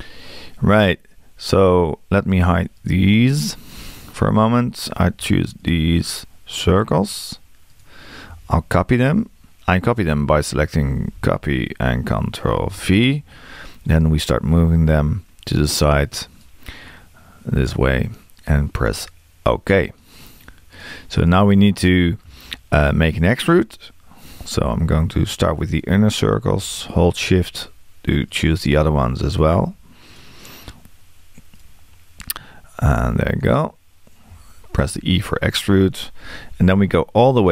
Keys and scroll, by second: 11.0 super+c.